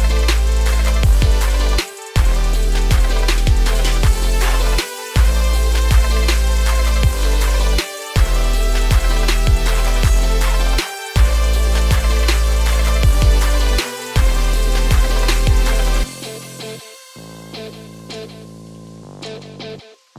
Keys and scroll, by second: 0.2 ctrl+space.